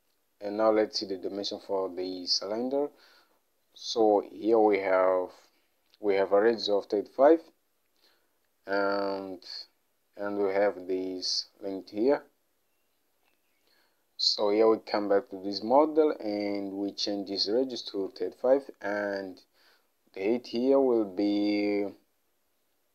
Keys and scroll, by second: 18.0 typing.